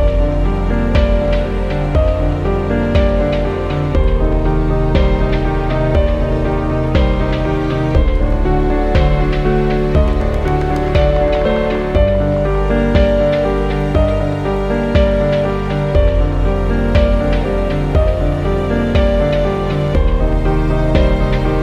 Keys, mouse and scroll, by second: 1.4 click, 2.3 shift+Up, 3.1 ctrl+z, 3.9 ctrl+shift+z, 4.4 click, 5.4 shift+click, 5.9 shift+Up, 6.9 ctrl+z, 7.9-9.6 drag, 9.6 scroll down 1, 9.9 scroll up 1, 11.0 click, 11.6 shift+Up, 12.2 shift+Down, 12.7 shift+Up, 13.6 click, 14.1 shift+click, 14.6 shift+Down, 16.0 ctrl+t, 17.3 click, 18.3 ctrl+t, 18.9 alt+click, 19.6 shift+Up, 20.6 shift+Down.